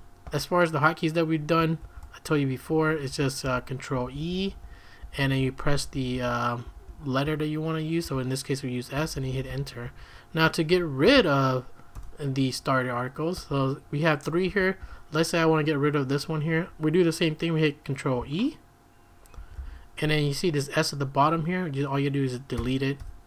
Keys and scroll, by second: 0.0-0.7 typing, 1.8 shift+v, 2.7 Escape, 2.8-11.2 typing, 9.8 Escape, 10.0 Escape, 11.9 Return, 13.3 k, 14.5 j, 14.8 k, 19.3 ctrl+e, 21.3 Right, 22.6 BackSpace, 23.0 BackSpace.